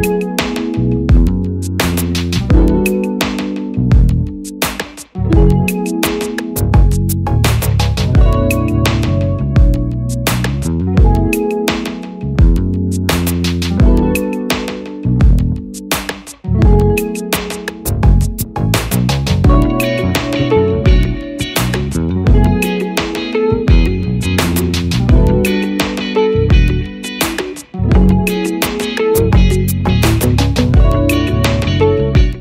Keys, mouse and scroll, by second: 5.0 Return, 10.8 double click, 15.7 Return, 20.3 double click, 25.4 Return, 32.2 click.